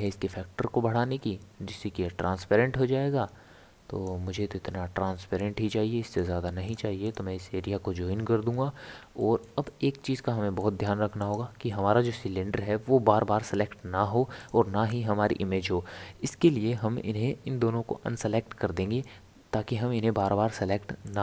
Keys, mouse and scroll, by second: 0.1-3.1 drag, 6.1-9.2 right drag, 9.2-11.2 shift+middle drag, 11.2 click, 14.4 click, 21.0-21.2 drag.